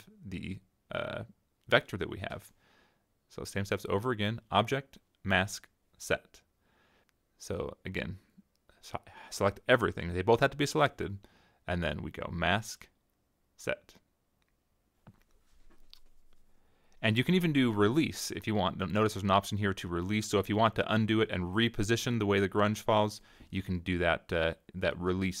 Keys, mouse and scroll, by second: 1.2-2.9 drag, 4.2 click, 6.6 click, 7.9 middle click, 8.0 click, 8.3 middle click, 8.3 click, 8.4 middle click, 8.6 click, 8.6 click, 8.9 ctrl+z, 9.5-11.0 drag, 12.4 click, 15.7 click, 18.2-19.4 drag, 20.6 click, 23.8 click.